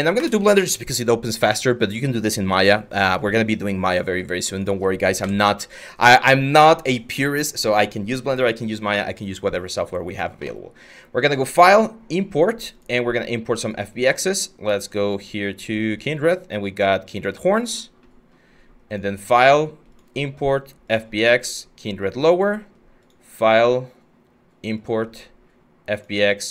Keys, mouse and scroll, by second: 4.8 Delete, 23.6-26.5 drag.